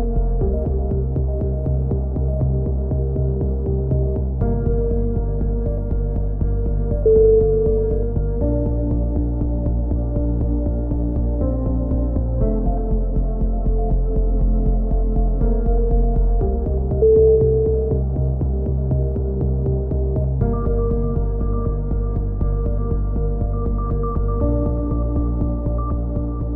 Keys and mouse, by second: 0.1 click, 1.1-2.1 right drag, 1.6 click, 2.2 a, 3.7 middle click, 4.2-6.5 drag, 6.5 middle click, 7.9-9.7 right drag, 9.3 x, 10.3 z, 10.9 z, 18.1 right click, 19.7-20.7 drag, 20.7 middle click, 21.5 right click, 22.6 z, 22.8 z, 23.0 z, 23.2 z, 23.9 click.